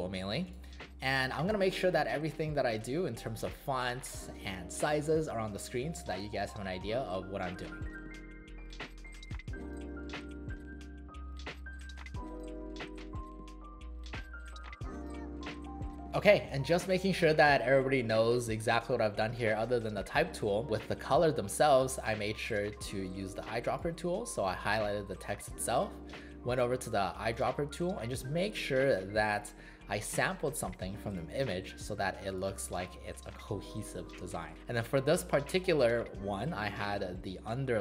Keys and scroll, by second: 1.5 v.